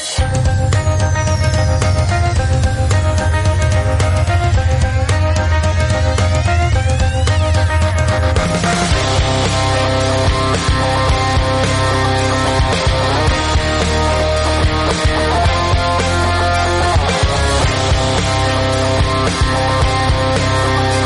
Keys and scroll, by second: 0.0-5.9 typing, 8.0 ctrl+g, 8.3 Tab, 9.6 typing, 14.7-17.5 typing, 18.6-20.3 typing.